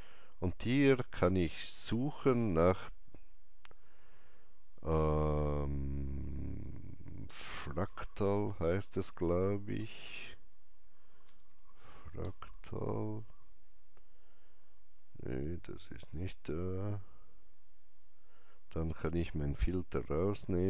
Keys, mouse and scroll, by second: 2.3 click, 2.3 scroll up 1, 8.0-9.1 typing, 8.2 click, 11.0-12.2 typing, 16.7-17.2 scroll up 1, 16.7 typing, 19.5 click, 19.5 scroll up 1, 19.5 typing.